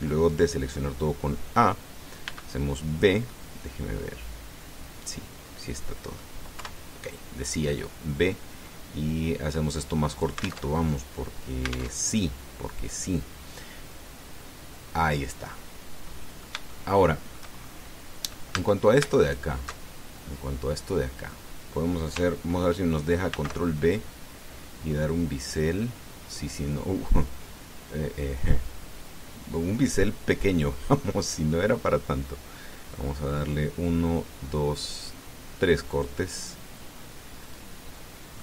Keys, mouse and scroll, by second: 3.0 b, 3.3 click, 4.1-7.2 middle drag, 7.3 KP_1, 9.1-11.4 drag, 11.5 alt+Tab, 12.7 alt+Tab, 15.8-17.0 drag, 17.2-18.3 shift+drag, 18.4-18.8 shift+scroll up 3, 19.3 a, 20.1 alt+shift+right click, 20.7 alt+shift+scroll down 2, 20.9-22.3 alt+shift+drag, 24.1 ctrl+b, 33.6 scroll up 2, 34.8 scroll up 2, 35.9 scroll up 2, 36.7 click, 37.7-38.2 scroll down 4, 38.2-38.4 middle drag.